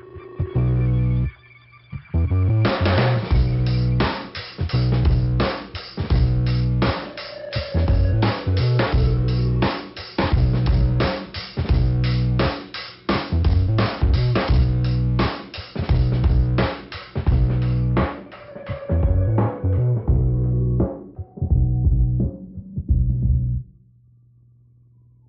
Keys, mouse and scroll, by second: 1.1 click, 1.6 click, 2.6 click, 4.9 click, 5.7 click, 7.0 click, 8.1 scroll down 1, 9.4 click, 11.2 click, 11.9 click, 15.9 click, 16.7 click, 18.0 click, 18.6 click, 19.4 click, 19.5 click, 20.6 click, 21.5 scroll down 2, 23.2 scroll up 2, 23.9 click.